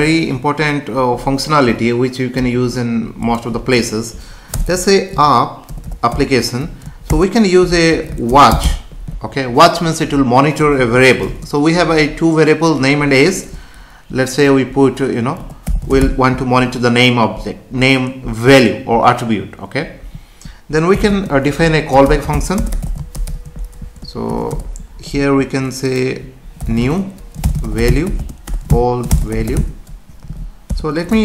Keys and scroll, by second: 4.5 Return, 16.5 Right, 21.1 space, 24.5 Return, 28.2 space, 30.2 Down, 30.7 Tab.